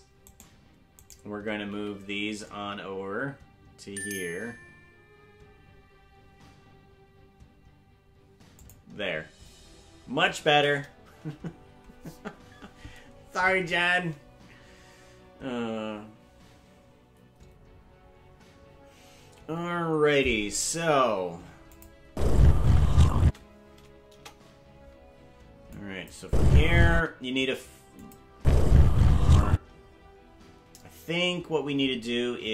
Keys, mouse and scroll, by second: 0.2 right click, 1.0 right click, 1.7 g, 21.7 click, 22.1 space, 23.2 space, 24.1 KP_0, 25.7 click, 26.2 space, 27.0 space, 28.0 click, 28.3 space.